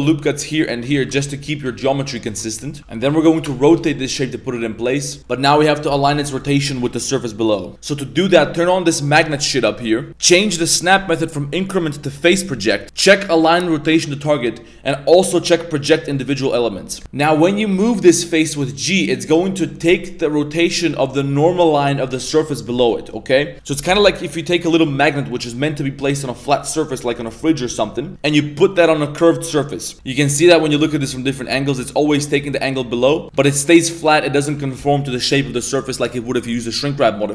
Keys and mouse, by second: 0.0 ctrl+r, 0.6 click, 0.9 z, 1.0 a, 1.6 z, 2.8 Tab, 2.8 r, 3.7 z, 5.1 z, 5.2 middle click, 5.7 middle click, 9.1 click, 10.1-17.0 drag, 17.7 g, 29.9-30.8 middle drag, 31.3 g, 34.1 middle drag, 34.1 g, 34.5 middle click, 35.1-35.5 middle drag, 35.7 middle click, 37.2-37.3 middle drag.